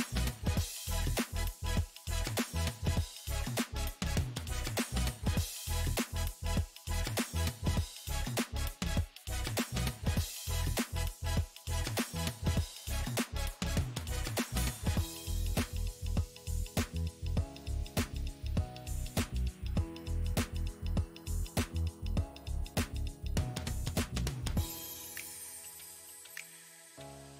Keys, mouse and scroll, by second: 5.8-6.9 drag, 6.9 f, 8.0 click, 8.8-11.0 middle drag, 11.0-16.0 drag, 16.0 p, 19.7-21.1 drag, 21.1 f, 22.8-26.1 drag, 26.1-27.3 middle drag.